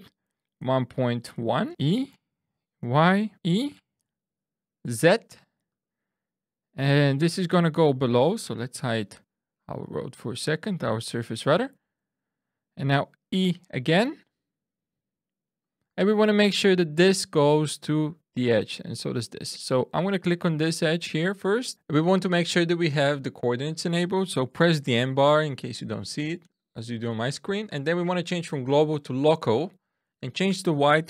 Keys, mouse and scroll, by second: 0.5-4.0 typing, 1.7 Return, 3.3 click, 5.7 click, 7.1 Tab, 7.5 click, 8.8 h, 9.7 click, 10.5 shift+middle click, 11.8 Tab, 13.4 e, 14.1 middle click, 15.6 click, 20.0 click, 24.5 n, 25.8 n, 30.2 click.